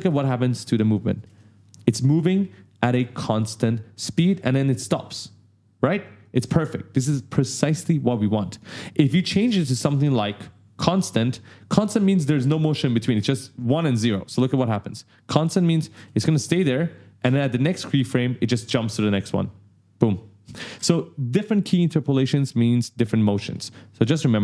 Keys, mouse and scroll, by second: 0.3 click, 1.0 space, 6.0 click, 8.4 click, 9.9 right click, 14.2 click, 15.3 click, 15.7 space, 20.5 space, 23.1 click, 23.8 click.